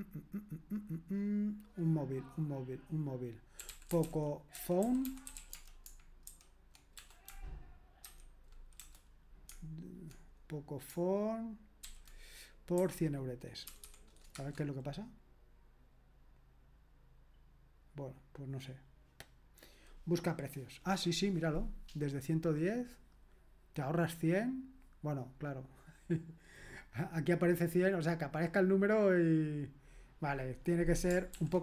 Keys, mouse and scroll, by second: 3.3-7.0 typing, 8.0-8.8 typing, 11.8-13.8 typing, 14.3 Return, 31.4 ctrl+p.